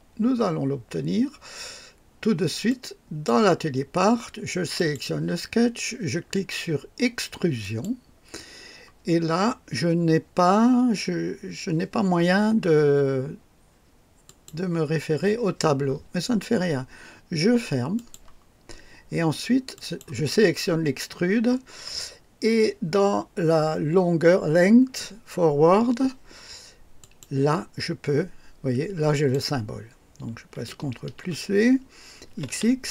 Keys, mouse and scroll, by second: 2.7 click, 4.8 click, 7.6 click, 14.2 click, 17.9 click, 19.7 click, 27.0 click, 29.1 click, 31.1 ctrl+v, 31.1 ctrl+v, 32.3 x, 32.3 x, 32.4 x.